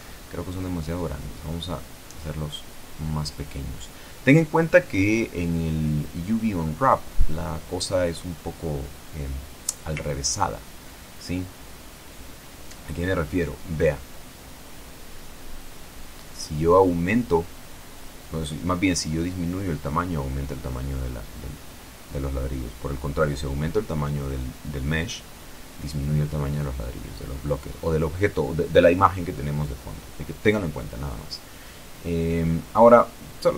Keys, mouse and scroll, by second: 0.8-3.2 drag, 3.8 t, 6.2 click, 7.0 click, 8.1 Escape, 9.7 click, 11.7 Tab, 13.6 click, 15.0 click, 16.3 middle click, 16.5 middle click, 16.6-17.2 scroll down 1, 17.2-18.6 scroll down 1, 18.6 s, 23.9 click, 25.5 Tab, 27.8 click, 31.8 ctrl+Left, 33.3-33.5 drag.